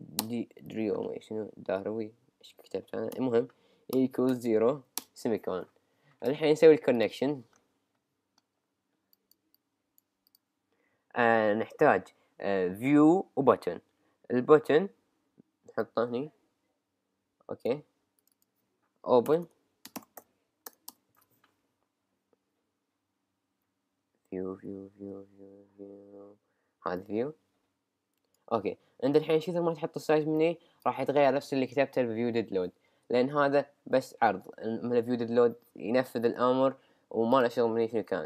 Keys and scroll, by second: 0.2 Return, 19.3-20.2 typing, 20.9 Return.